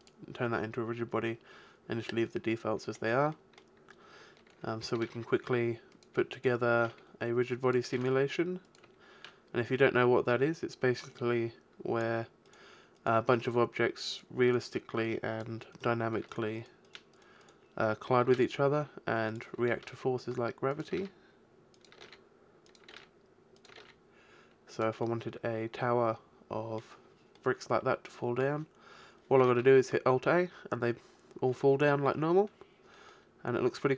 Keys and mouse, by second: 1.8-4.8 middle drag, 5.0 shift+d, 6.4-7.8 right drag, 6.8 shift+d, 7.8 click, 8.0 shift+d, 13.1 right click, 18.2 shift+d, 19.8 shift+d, 21.0 shift+d, 22.0 shift+d, 23.0 shift+d, 23.8 shift+d, 27.6 middle click, 29.6 alt+a, 33.2-33.9 middle drag.